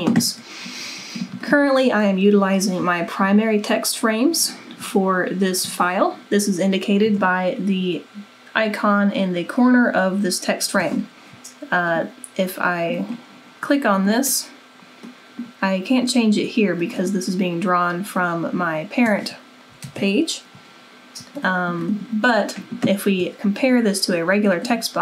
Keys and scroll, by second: 7.2 super+=, 20.0 super+-.